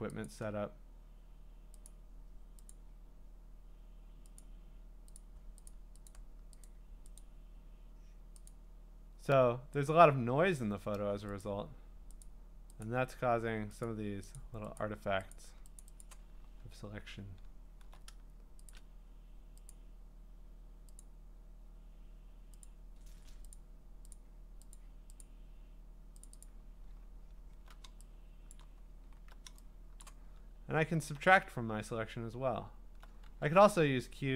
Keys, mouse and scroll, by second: 0.3 click, 1.9 click, 3.3 click, 4.4 click, 5.6 click, 5.7 click, 6.6 click, 7.2 click, 8.5 click, 9.9 click, 11.5 click, 12.2 click, 12.9 click, 13.8 click, 14.4 click, 14.8 click, 15.4 click, 15.8 click, 16.1 click, 16.5-17.0 scroll down 10, 17.1-17.4 scroll up 6, 17.4-17.8 scroll, 18.7 shift+click, 19.7 click, 19.8 scroll down 10, 21.0 click, 22.6 click, 23.5 click, 24.1 click, 25.2 click, 26.2 click, 26.2 click, 26.5 click, 26.9-27.4 scroll, 28.5 click, 28.6 click, 29.1 alt+scroll, 29.8 click, 30.0 alt+scroll, 30.0 click, 32.0 click, 33.1 click, 33.2 q.